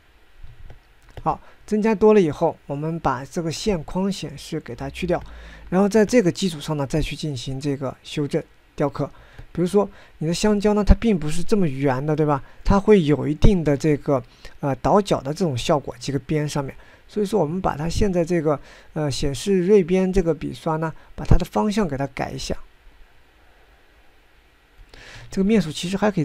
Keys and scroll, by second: 14.6 ctrl+z.